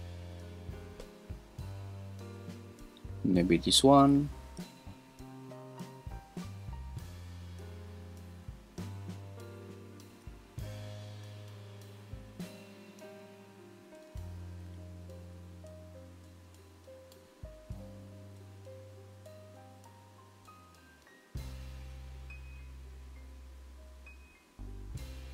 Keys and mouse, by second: 3.4 click, 4.7-10.1 shift+drag, 11.4 click, 12.9 click, 13.5-14.6 drag, 14.7-21.8 shift+drag, 23.2 click, 24.5 click.